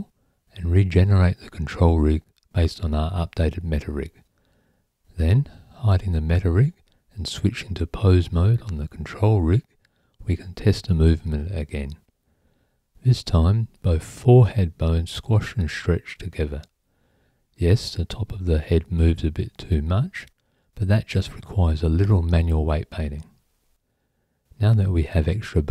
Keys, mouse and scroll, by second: 0.0 click, 0.7 click, 1.9 click, 3.2 click, 6.2 click, 6.9 click, 7.8 Tab, 10.7 click, 15.4 click, 16.0 click, 21.2-25.7 right drag.